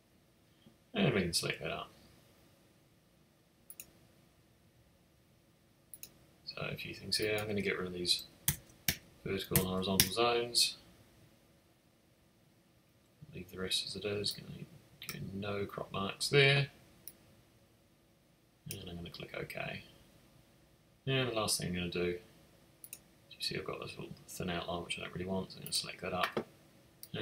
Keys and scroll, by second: 8.4 0, 8.8 Tab, 9.5 0, 9.9 Tab.